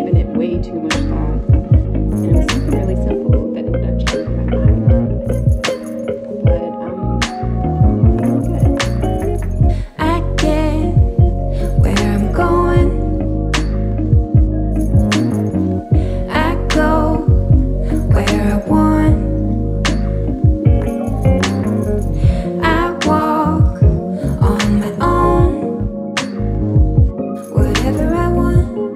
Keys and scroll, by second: 11.3 ctrl+g, 19.7 KP_1, 19.9 KP_5, 21.6 KP_1.